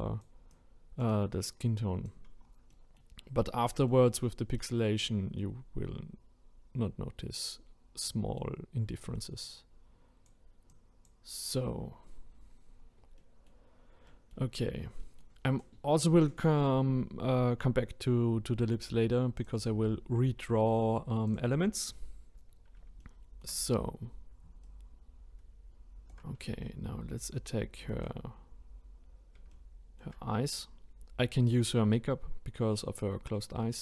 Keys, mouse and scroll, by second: 2.3 scroll down 1, 2.7-3.2 middle drag, 3.2-3.7 scroll up 2, 3.7-5.0 middle drag, 5.0-8.0 drag, 8.0-8.6 middle drag, 8.6-9.4 scroll up 1, 9.4-12.7 drag, 12.7-13.2 scroll down 1, 13.2-18.0 middle drag, 19.4-23.0 drag, 23.0-24.6 shift+middle drag, 24.6-26.6 ctrl+right drag, 26.6-32.5 shift+middle drag.